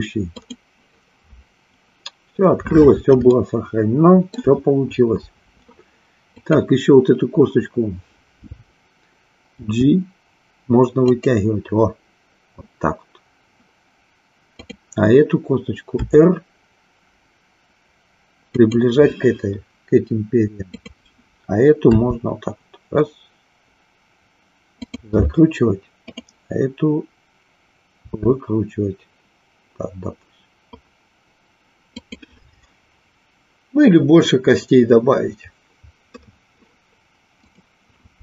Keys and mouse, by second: 3.3-4.6 shift+middle drag, 6.3-7.8 drag, 9.6 g, 11.2 click, 14.5-16.0 drag, 16.0 r, 18.7 click, 20.7-22.1 drag, 22.2 r, 24.9 click, 28.0 r, 32.0 click, 38.0 click.